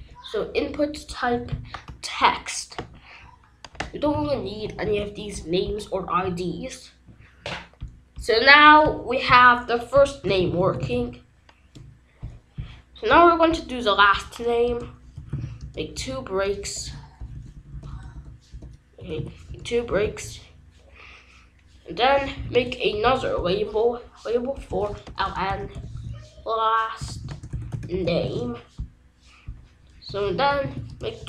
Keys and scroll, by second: 4.0 BackSpace, 4.8 ctrl+s, 10.0-11.4 typing, 14.6 Return, 14.9-17.1 typing, 18.7-19.6 typing, 21.9-23.0 typing, 24.4-28.7 typing, 30.0 Return, 30.2-31.1 typing.